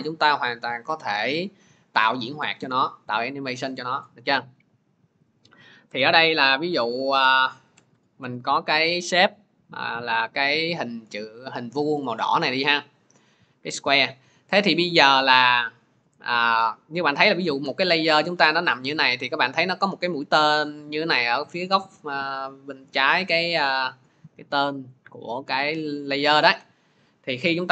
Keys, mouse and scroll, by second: 5.2 click, 5.7 Return, 6.2-8.1 typing, 13.7 click, 16.3 click, 18.7 click, 19.3 click, 24.7 click, 25.8 click.